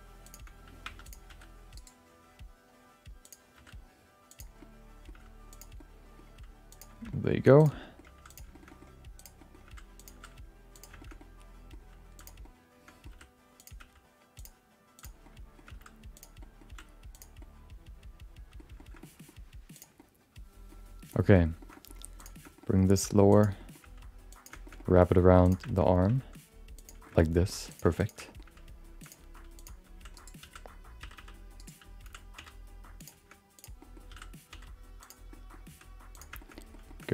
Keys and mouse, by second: 0.8 2, 1.0 click, 1.3 r, 3.2 click, 3.5 r, 4.6 middle click, 5.5 g, 5.7 middle click, 6.3 g, 7.1 middle click, 7.6 click, 7.8 middle click, 8.0 g, 8.5 shift+middle click, 8.7 middle click, 9.2 click, 9.4 middle click, 9.6 g, 10.1 s, 11.0 shift+middle click, 11.2 middle click, 11.8 g, 12.4 middle click, 13.6 r, 13.8 g, 14.9 click, 15.2 middle click, 15.7 g, 16.4 middle click, 16.7 r, 17.4-18.6 middle drag, 18.8 shift+middle click, 19.0 middle click, 19.7 click, 19.9 middle click, 21.1 shift+middle click, 21.3 middle click, 21.6 middle click, 21.7 middle click, 22.2 click, 22.5 middle click, 22.9 s, 23.5 middle click, 23.8 g, 24.6 shift+middle click, 24.7 middle click, 25.4 click, 25.6 shift+middle click, 25.8 middle click, 26.3 g, 27.0 shift+middle click, 27.2 middle click, 27.7 click, 28.0 click, 28.2 middle click, 29.0 g, 29.2 r, 29.9 s, 30.4 s, 32.0 s, 33.6 click, 33.8 middle click, 34.1 s, 35.3 middle click, 35.7 r, 36.4 shift+middle click, 36.5 middle click, 36.9 shift+middle click.